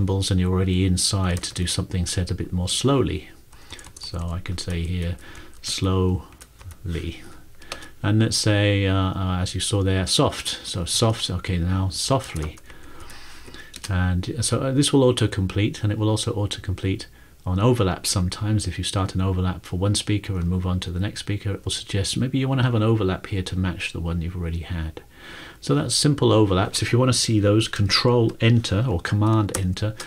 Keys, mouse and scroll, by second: 1.1-2.1 typing, 3.5-6.6 typing, 7.2 Right, 7.7-14.0 typing, 29.6 ctrl+Return.